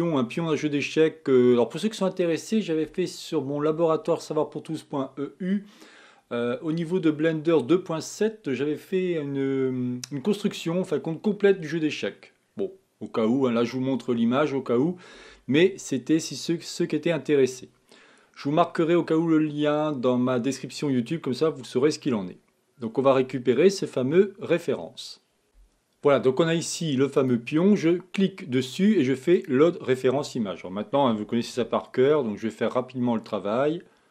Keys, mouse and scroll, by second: 31.9 g.